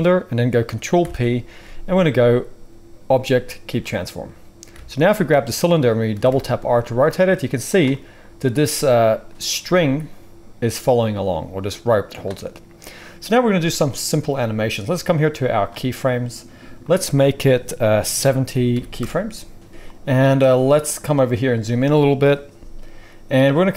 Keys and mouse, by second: 0.7-2.3 ctrl+middle drag, 1.0 ctrl+p, 4.0-4.7 middle drag, 4.7 alt+a, 6.1 r, 8.9 middle drag, 9.4 r, 9.6-15.1 middle drag, 15.1-23.7 drag.